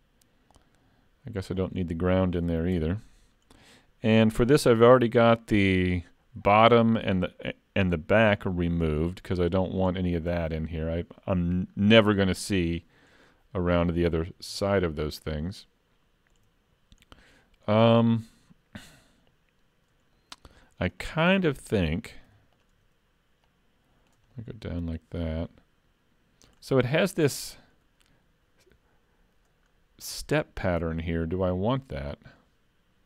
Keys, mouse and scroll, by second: 1.5 click, 2.8 KP_Decimal, 3.9 middle click, 8.5 shift+middle click, 9.1-9.6 scroll up 3, 9.6 scroll down 2, 9.9 shift+middle click, 11.8-12.6 scroll down 2, 14.7 shift+middle click, 16.6-17.7 scroll down 1, 17.7 scroll up 1, 20.2 middle click, 20.9 click, 21.3 Tab, 21.6 middle click, 22.3 3, 22.6 click, 23.5 click, 24.6 middle click, 27.0-28.6 scroll up 4, 29.7 scroll down 4, 31.3-31.8 scroll down 3, 31.7-33.0 scroll up 2.